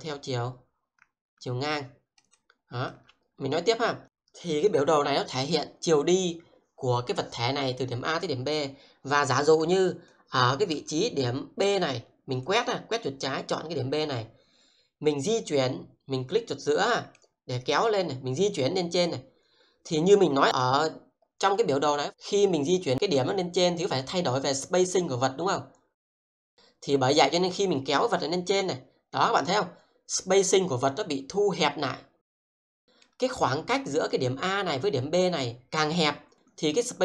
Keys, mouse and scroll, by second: 3.2 scroll down 1, 4.0 middle click, 10.1-13.5 drag, 17.1-20.9 middle drag, 21.3 click, 28.6-33.1 middle drag, 34.0 click.